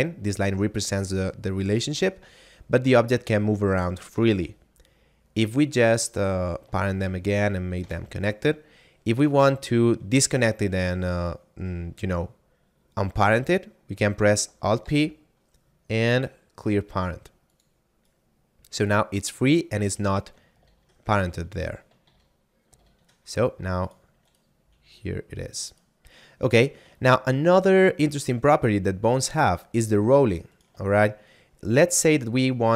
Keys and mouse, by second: 1.7 right click, 5.7 shift+right click, 6.8 ctrl+p, 7.7 Return, 9.1 right click, 14.6 alt+p, 17.5 click, 18.0 right click, 20.4 ctrl+z, 22.1 ctrl+z, 22.7 ctrl+z, 23.8 right click, 24.6 r, 25.7 right click, 27.2 shift+middle click, 30.4 right click, 31.0 shift+middle click.